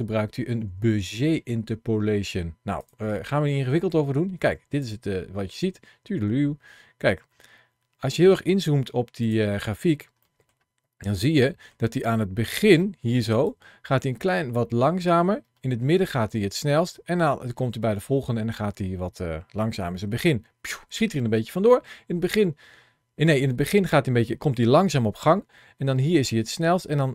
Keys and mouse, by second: 4.3 click, 5.3 space, 8.1 space, 10.1 middle click, 11.3 middle click, 13.3-27.1 drag.